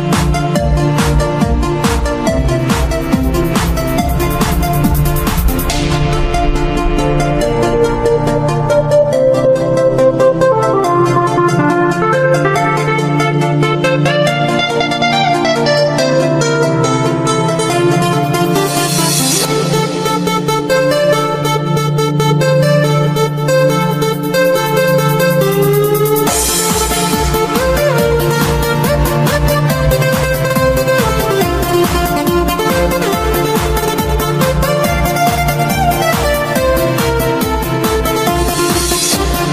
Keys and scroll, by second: 0.4 g, 9.3-10.2 typing, 16.7 p, 18.7 z, 21.9 z, 24.9 p, 26.0 s, 26.9 ctrl+s, 27.7 ctrl+j, 30.4 v, 31.0 g, 31.4 p, 39.3 g.